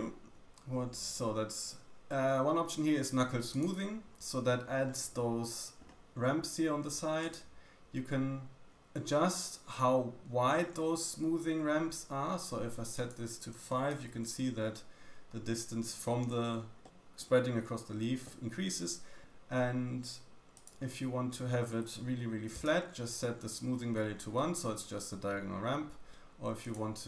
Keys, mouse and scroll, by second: 0.3 d, 3.7 click, 3.7-4.8 middle drag, 3.7 right click, 7.7-9.4 drag, 7.7-9.4 middle drag, 7.7-9.4 right drag, 12.9-26.9 drag, 12.9-26.9 middle drag, 12.9-26.9 right drag.